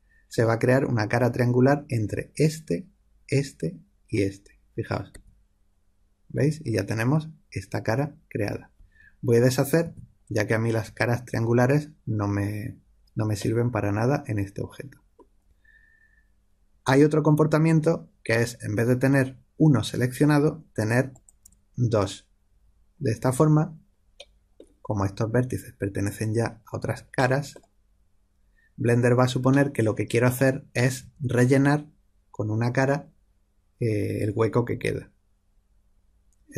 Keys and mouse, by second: 5.1 f, 9.8 ctrl+z, 13.3-21.0 middle drag, 21.0 click, 24.5-26.8 middle drag, 27.1-36.5 middle drag.